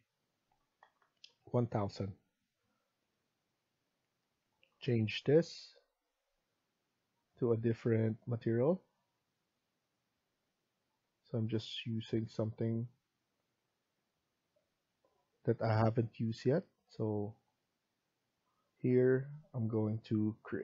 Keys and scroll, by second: 0.5-1.3 typing.